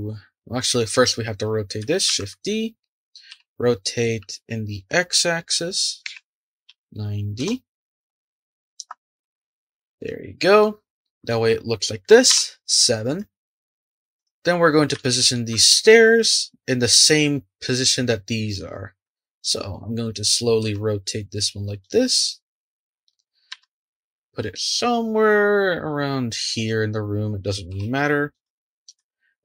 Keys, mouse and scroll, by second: 0.8 click, 2.1 shift+d, 8.1 r, 9.2 r, 10.0-10.8 middle drag, 10.8-12.3 scroll down 2, 12.3 KP_7, 13.2-14.1 shift+middle drag, 14.1 click, 14.9-18.0 shift+middle drag, 19.6-20.1 scroll up 3, 20.1-20.6 scroll down 2, 20.6 r, 23.5 g, 27.7 r.